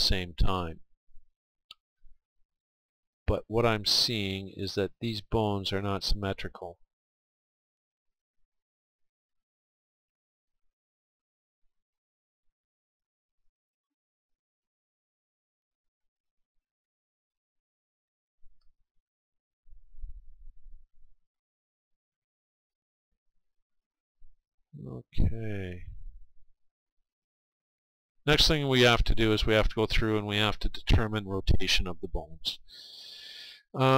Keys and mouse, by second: 1.9 KP_3, 4.5 r, 7.4 r, 8.5-11.4 drag, 9.4-11.4 right drag, 14.1 r, 15.5-20.1 drag, 21.1-25.5 middle drag, 27.4-33.9 middle drag.